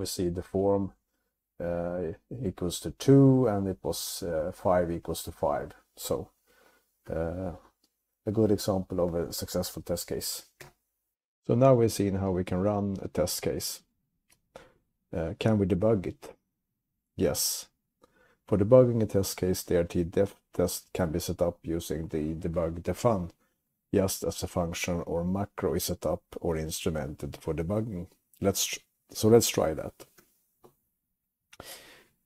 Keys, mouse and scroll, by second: 10.7 q, 29.9-30.7 typing, 30.2 click, 32.2 Up.